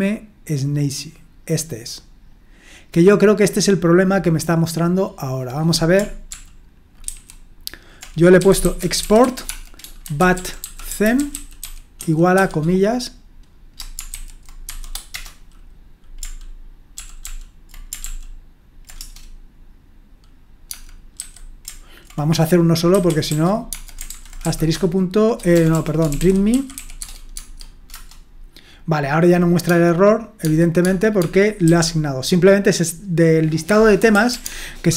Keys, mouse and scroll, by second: 0.6-2.1 drag, 2.1-3.7 scroll up 1, 3.7-5.3 scroll up 1, 5.3-6.3 scroll up 1, 6.3 ctrl+p, 7.0 ctrl+c, 8.1-12.8 typing, 14.1 ctrl+v, 14.7 typing, 15.1 Return, 16.9 ctrl+p, 17.2 ctrl+p, 18.0 ctrl+p, 19.0 Return, 20.7-21.2 typing, 22.7-27.2 typing, 27.9 Return, 29.6-31.7 typing, 33.7-34.9 typing.